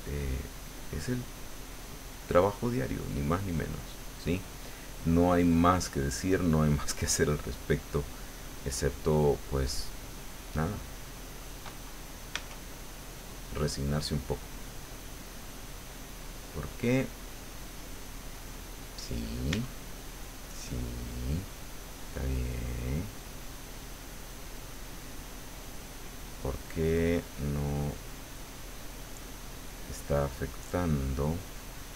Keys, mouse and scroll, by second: 0.0 click, 0.8 click, 1.4 click, 1.9 click, 2.4 click, 3.1 right click, 3.6 right click, 8.0 click, 8.9 middle click, 10.6 click, 12.4 Tab, 19.5 Tab, 29.5 click, 29.9 click, 31.4-31.9 drag.